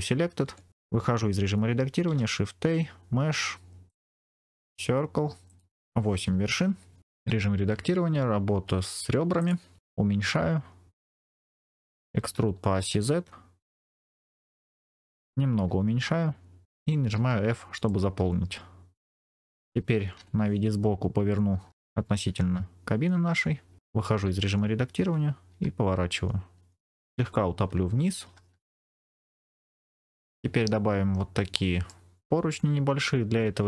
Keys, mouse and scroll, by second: 0.4 Tab, 2.0 shift+a, 5.4 click, 7.2 Tab, 9.3 click, 9.8 s, 11.3 click, 11.4-12.7 scroll up 3, 12.0 e, 12.7 z, 14.5 click, 15.4 s, 17.0 f, 17.8-18.9 middle drag, 20.8 scroll up 2, 20.8 KP_1, 22.7-23.6 scroll up 1, 24.1 Tab, 25.4 r, 26.9 click, 28.1 g, 28.2 z, 28.9 click, 29.1 click, 29.3 middle click, 29.6-30.2 scroll down 2, 31.1-31.4 scroll up 2, 31.4 middle click.